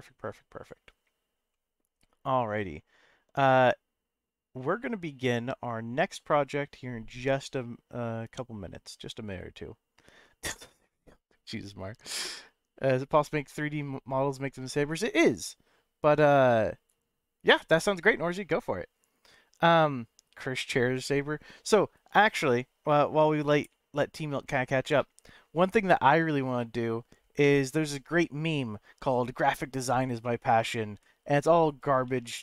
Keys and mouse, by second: 1.5-1.9 middle drag, 25.0 middle click, 26.6-26.9 middle drag, 30.2 middle click, 31.0 b, 32.0 n.